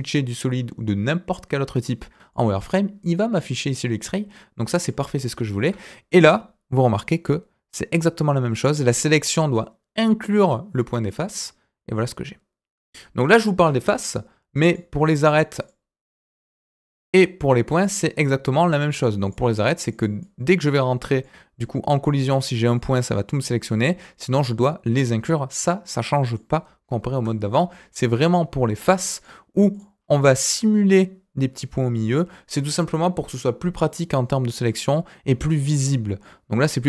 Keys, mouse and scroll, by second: 2.3 click, 4.5 middle click, 5.6 KP_1, 6.2-7.0 scroll up 1, 7.0-11.0 drag, 11.7 scroll down 2, 11.9 middle click, 13.5 KP_1, 14.6 click, 14.9 middle click, 15.2-15.5 scroll up 2, 15.5 click, 16.2 click, 17.7 click, 19.2 click, 19.9 middle click, 20.2 click, 21.1 scroll down 1, 21.2 middle click, 22.1 click, 22.7 middle click, 23.4 middle click, 24.0 click, 24.9-26.4 middle drag, 27.1 KP_1, 29.1 click, 29.7 click, 29.9 scroll up 1, 36.0 scroll down 1, 36.2 middle click.